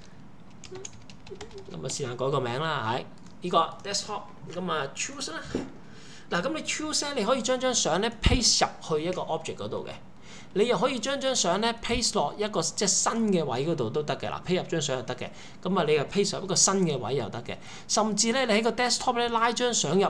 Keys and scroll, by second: 0.5-2.1 typing, 16.3 Escape.